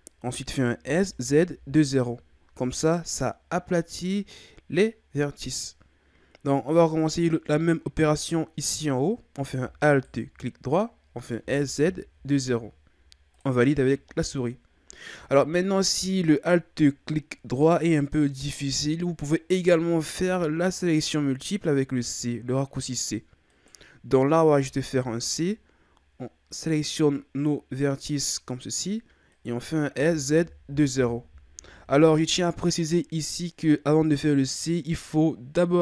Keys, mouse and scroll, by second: 0.8 s, 6.0-9.1 scroll up 2, 9.9 alt+right click, 11.4 s, 20.3 z, 23.5 right click, 24.6 c, 29.9 s.